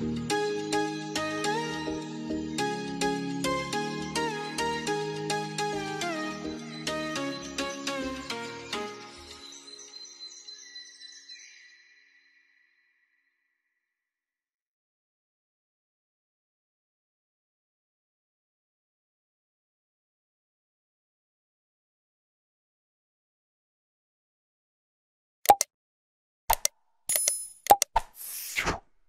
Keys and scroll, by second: 13.2 F2.